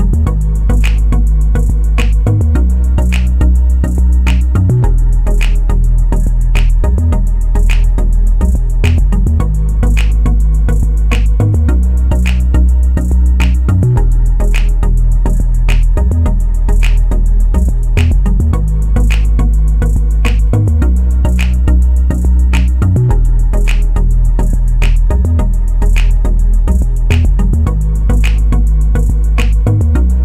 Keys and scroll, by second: 25.7-26.6 typing.